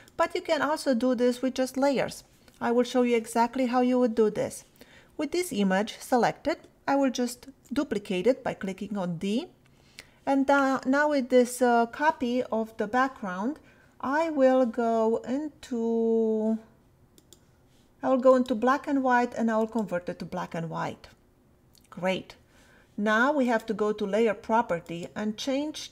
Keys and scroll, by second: 7.5 d.